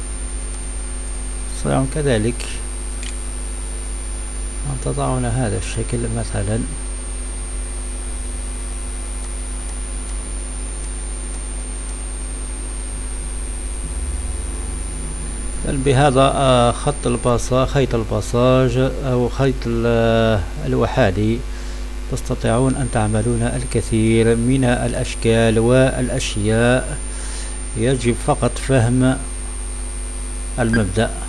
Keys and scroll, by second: 2.9 space.